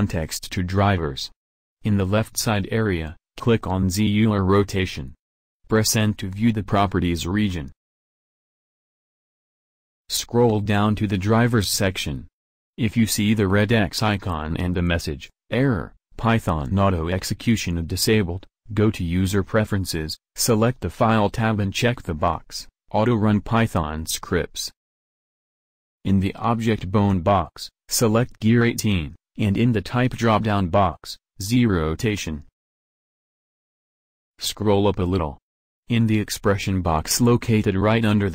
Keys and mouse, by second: 5.9-9.5 drag, 9.5 n.